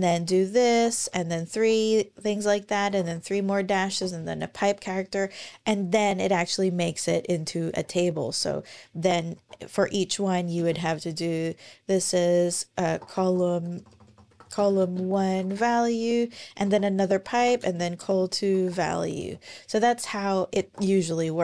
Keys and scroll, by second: 0.0-1.3 typing, 2.7-3.7 typing, 6.7-7.6 scroll down 1, 7.6-8.2 scroll up 1, 8.2-8.7 scroll down 1, 9.1 shift+\, 10.4 space, 12.7-19.2 typing, 20.4 shift+Return.